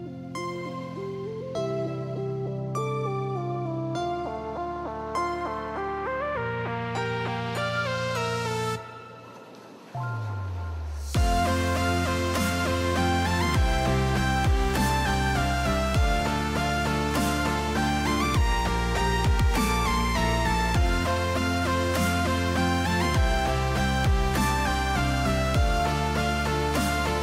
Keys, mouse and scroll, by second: 0.3 click, 2.0 middle click, 4.9 ctrl+x, 5.5 right click, 6.3 g, 7.6 right click, 8.3 click, 10.8 right click, 11.7 a, 13.6 middle click, 14.0 s, 15.8 middle click, 18.4 click, 26.9 click.